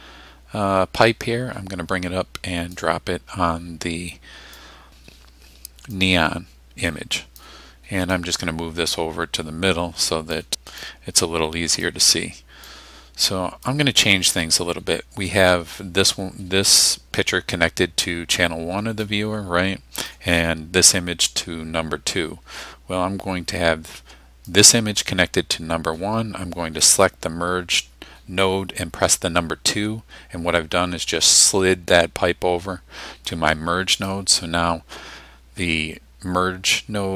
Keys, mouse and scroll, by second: 4.6 click, 6.0-7.6 drag, 8.2-10.5 drag, 10.9 click, 12.7-13.9 drag, 19.1-20.3 drag, 24.5 click, 26.9 click, 29.7 2, 33.3-34.3 drag.